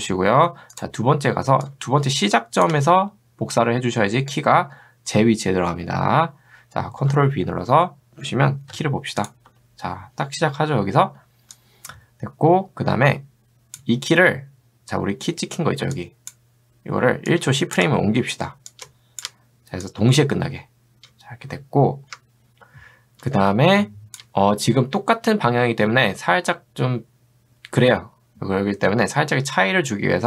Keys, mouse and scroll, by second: 1.7-2.7 shift+drag, 7.2 ctrl+v, 8.8 u, 9.2 click, 12.1-13.9 drag, 16.0 click, 17.3 shift+click, 18.9 shift+click, 19.9-24.2 drag.